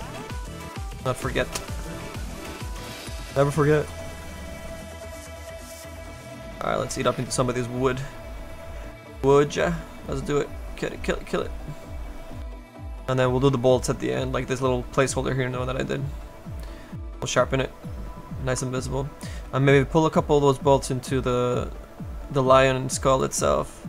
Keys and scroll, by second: 0.6 s, 1.2 s.